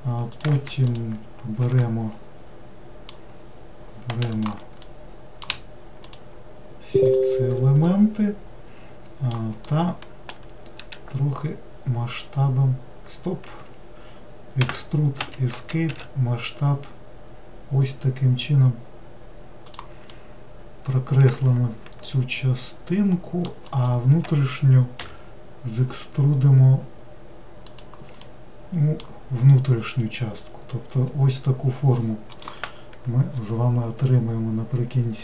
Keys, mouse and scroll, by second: 0.3 click, 0.9 ctrl+shift+click, 1.8-3.4 middle drag, 3.4-4.3 scroll down 1, 4.3 shift+click, 4.9-6.0 middle drag, 6.0 shift+click, 7.0 shift+click, 7.8-10.8 middle drag, 10.8 s, 14.6 e, 15.9 s, 20.1-23.2 middle drag, 23.7 click, 25.0 e, 28.2-31.2 middle drag.